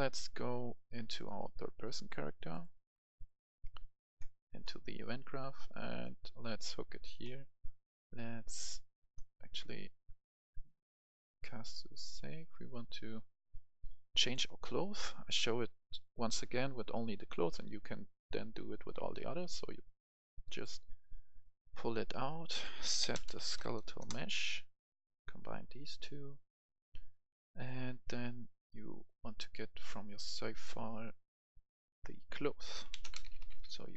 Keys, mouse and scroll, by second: 1.1 click, 1.8 right click, 2.5 click, 4.1 right click, 4.8-5.2 scroll up 1, 5.2-10.4 right drag, 13.9 click, 15.0 right click, 21.1-23.4 drag, 22.6-23.5 typing, 23.9 Return, 25.0-27.4 drag, 27.4-31.4 right drag, 31.4 click, 32.7-33.6 typing.